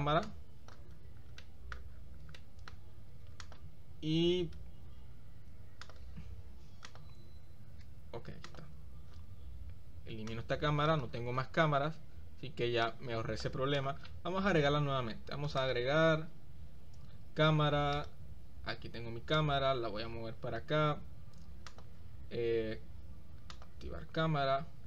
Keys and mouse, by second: 0.2 click, 1.4-1.8 middle drag, 2.5 click, 2.9-4.4 middle drag, 4.5 x, 5.5 x, 6.9 click, 8.1 x, 10.3 click, 12.9 click, 13.8-14.1 drag, 14.2 middle click, 15.8-18.4 drag, 19.6-20.8 drag, 21.9-23.8 drag.